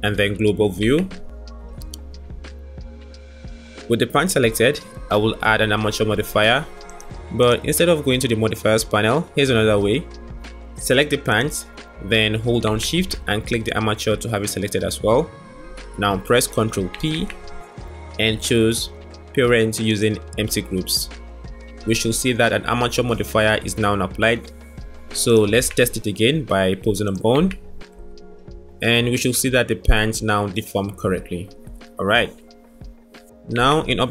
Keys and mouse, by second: 0.8 KP_Divide, 6.7 click, 7.8-9.0 drag, 11.2 click, 13.1 shift+click, 17.1 ctrl+p, 25.5 Tab, 26.8 click, 27.5 r, 33.5 Tab.